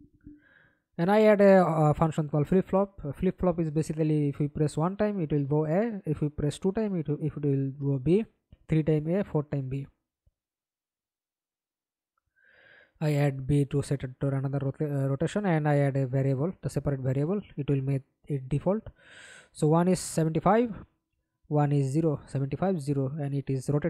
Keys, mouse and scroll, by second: 2.9 ctrl+c, 3.8 ctrl+v, 9.3 right click, 10.6 double click, 11.7 double click, 14.6 double click, 14.9 middle click, 15.8 F11, 16.3 alt+p, 17.3-19.3 typing, 20.4-23.8 typing.